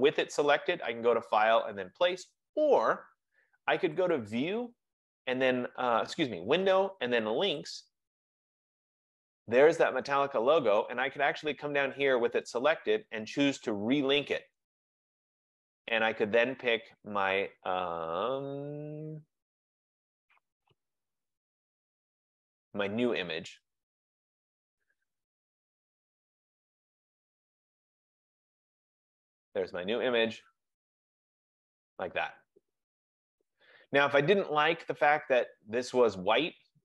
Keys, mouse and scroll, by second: 4.2 click, 7.8 click, 14.8 click, 20.0 click, 22.5 click, 22.6 click, 24.7 click, 24.9 click, 26.5 click, 26.7 click, 28.0 click, 28.2 click, 29.6 click, 36.4 click.